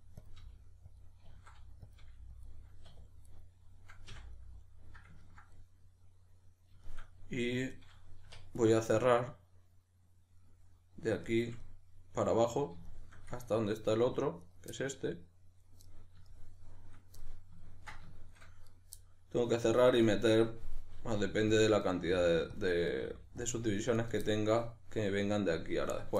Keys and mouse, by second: 0.3 click, 0.4 g, 1.0 click, 1.3 s, 2.5 click, 2.9 2, 3.3 right click, 4.1 f, 4.3-8.6 middle drag, 8.3 1, 8.6 right click, 9.0-14.4 middle drag, 14.4 right click, 14.7-18.6 middle drag, 18.6 right click, 19.0-21.9 middle drag, 21.0 g, 21.7 click, 21.9 right click, 22.0 g, 22.6 middle click, 22.6 click, 22.9 right click, 23.1 g, 23.5-24.0 middle drag, 23.5 click, 24.0 right drag, 24.3-26.1 middle drag.